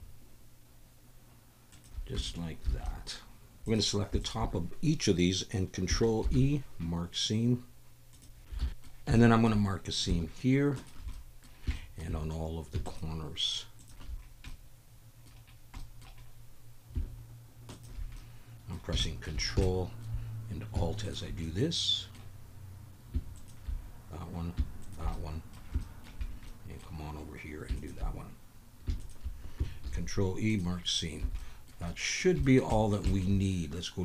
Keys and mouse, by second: 2.2 Tab, 2.8 alt+a, 2.8-3.2 drag, 3.2 alt+middle click, 3.4 Tab, 4.2 shift+click, 6.2 ctrl+e, 8.6 alt+a, 8.7 middle click, 8.7 2, 9.2 shift+click, 10.8 alt+shift+click, 10.8 typing, 11.1 middle click, 11.7 shift+click, 12.8 alt+shift+click, 13.8 alt+shift+click, 14.5 middle click, 15.8 middle click, 17.7 alt+shift+click, 18.2 middle click, 18.5 click, 19.0 shift+middle click, 19.6 shift+middle click, 21.0 alt+shift+click, 21.4 middle click, 23.3 alt+shift+click, 24.8 alt+shift+click, 25.1 middle click, 25.8 shift+middle click, 26.4 middle click, 29.0 alt+shift+click, 29.8 ctrl+e, 31.2 a, 31.4 click, 31.8 click, 32.4 shift+click, 32.7 click, 33.1 shift+click.